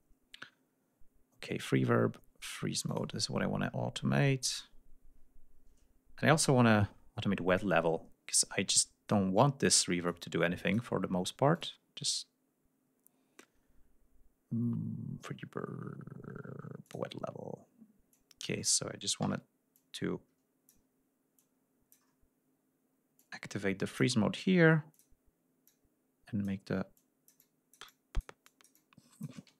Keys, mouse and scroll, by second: 2.9 click, 4.1 scroll down 2, 10.1 click, 11.6 click, 16.9 click, 18.1 click, 19.3 d, 19.8 click, 21.4 click, 23.2 click, 25.0 click, 25.7 click, 27.0-28.4 drag, 28.5 click.